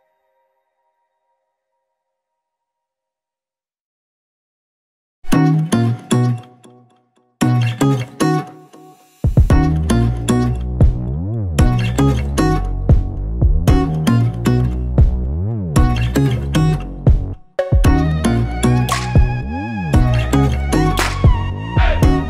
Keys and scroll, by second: 2.0 ctrl+z, 4.9-10.0 typing, 10.2 ctrl+Return, 11.2 ctrl+t, 17.8 Return, 18.0 Up, 18.6 v, 18.6 Up, 19.9 Down, 21.8 n.